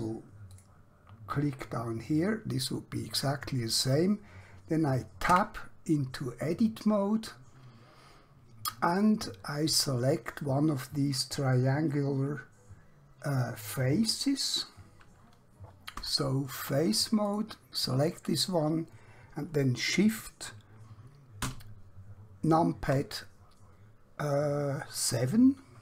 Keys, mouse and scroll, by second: 0.5 click, 5.3 Tab, 8.1-9.7 scroll up 1, 9.7-11.7 scroll down 1, 15.9 3, 17.3 click, 19.9 shift+Num_Lock.